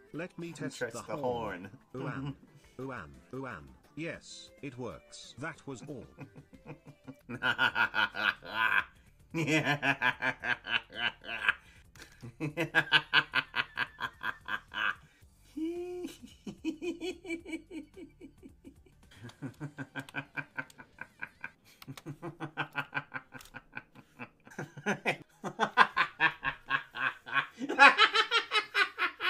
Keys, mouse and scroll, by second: 19.1 space, 19.3 space, 20.1 a, 21.7 space, 21.9 space, 25.2 space.